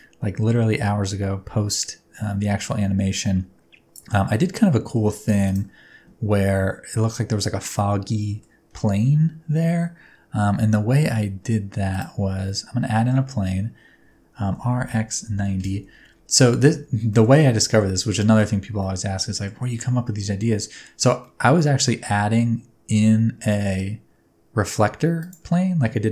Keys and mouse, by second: 0.0-4.0 drag, 4.6 middle click, 5.5 click, 7.8 middle click, 8.8 shift+a, 12.6 middle click, 14.0 Tab, 14.5 r, 14.9 x, 15.3 KP_9, 15.3 KP_0, 15.6 Return, 16.5 shift+middle click, 17.4 middle click, 18.2 shift+middle click, 18.8 middle click, 20.5 middle click, 21.3 middle click, 22.0 s, 25.2 click.